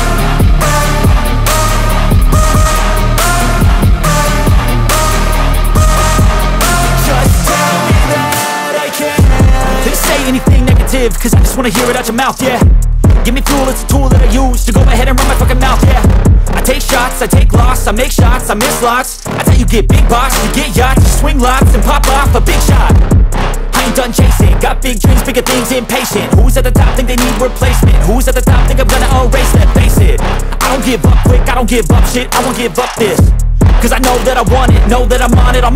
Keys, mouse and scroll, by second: 1.1 ctrl+super+z, 1.8 ctrl+super+z, 2.8 ctrl+super+z, 6.8 ctrl+super+z, 7.5 ctrl+super+z, 8.0 ctrl+super+z, 8.7 ctrl+super+z, 13.3 ctrl+super+z, 13.9 ctrl+super+z, 15.9 ctrl+super+z, 16.8 ctrl+super+z.